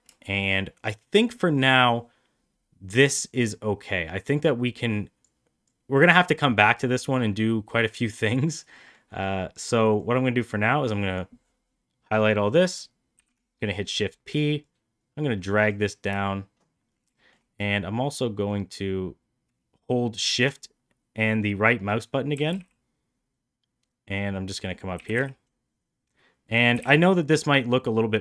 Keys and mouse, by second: 0.1 shift+middle drag, 3.3-5.1 drag, 5.5-8.2 drag, 8.7 middle click, 9.9-11.1 drag, 13.0 shift+p, 14.5-15.6 drag, 17.1 shift+middle click, 18.4-20.3 shift+right drag, 22.2 g, 24.8 g, 26.6 g.